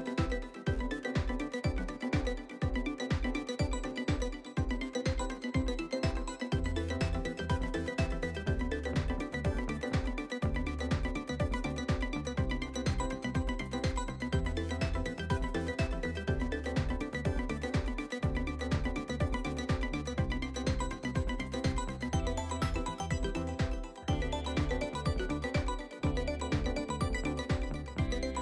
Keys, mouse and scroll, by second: 17.1 scroll down 3, 17.5-18.9 shift+middle drag, 18.9-20.4 scroll up 2, 20.4-21.6 scroll up 2.